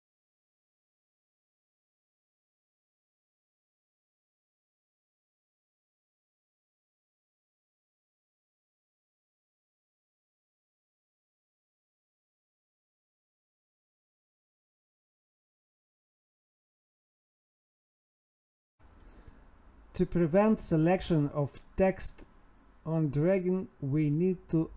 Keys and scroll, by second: 4.5 Escape, 4.7 Right, 11.2 Escape, 19.0 ctrl+s, 20.2 ctrl+s.